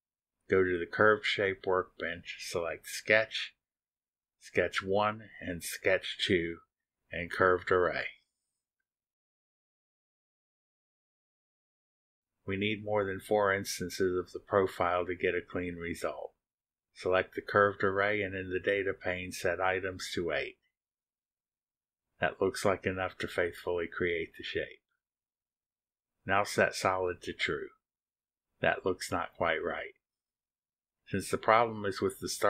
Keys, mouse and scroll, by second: 1.7 click, 3.7 click, 8.0 click, 9.5 ctrl+click, 9.9 ctrl+click, 11.2 click, 14.3-14.8 scroll down 2, 15.3 click, 15.4 middle click, 16.1 click, 16.1 scroll up 1, 16.3 drag, 16.4 middle drag, 18.2 click, 20.3 click, 22.4 click, 22.8 click, 23.5 click, 23.9 click, 26.6 click, 27.4 click, 29.1 click, 29.2 scroll down 1, 29.3-31.8 drag.